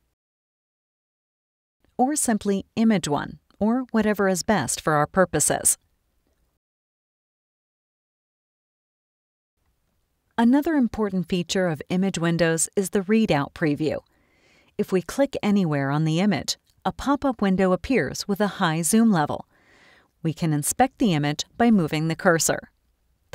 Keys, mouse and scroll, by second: 1.7 click, 1.8 click, 2.7-4.6 typing, 5.7 Return, 15.1-23.2 drag, 23.2 scroll up 2, 23.2 click.